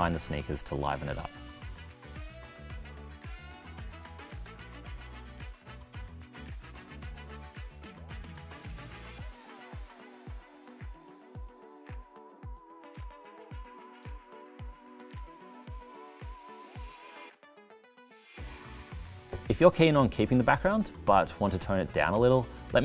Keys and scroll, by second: 9.6 c.